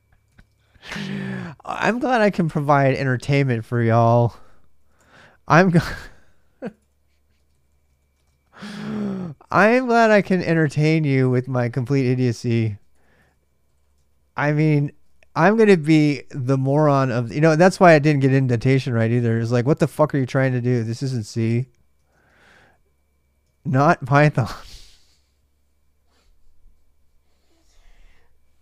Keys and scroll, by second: 0.0-10.6 typing, 1.6 Return, 2.2 ctrl+[, 2.3 ctrl+j, 3.6 Return, 11.6 ctrl+[, 11.7 ctrl+j, 12.0-23.6 typing, 14.9 ctrl+[, 15.0 ctrl+j, 20.0 Tab, 21.8 ctrl+[, 24.2 ctrl+[, 24.2 ctrl+j.